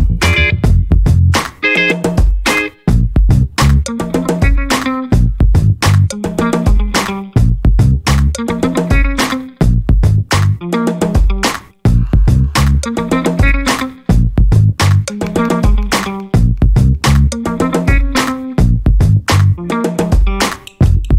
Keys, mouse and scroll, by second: 0.6 ctrl+scroll down 2, 1.2 ctrl+scroll up 2, 1.7 ctrl+click, 2.6-3.0 ctrl+scroll down 2, 3.3 ctrl+scroll up 2, 3.9 ctrl+click, 5.9 ctrl+click, 8.0 click, 9.4 click, 10.7-12.9 drag, 13.1 scroll down 2, 13.6 scroll up 2, 15.2 0, 15.8-18.2 drag, 18.6 click, 19.2 space, 19.9-21.1 drag.